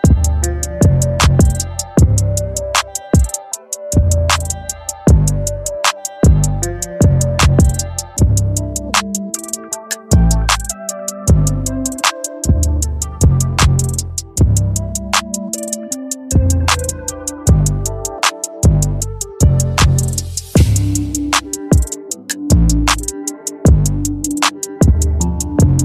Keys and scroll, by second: 3.8 Return, 13.5 ctrl+t, 16.2 Return.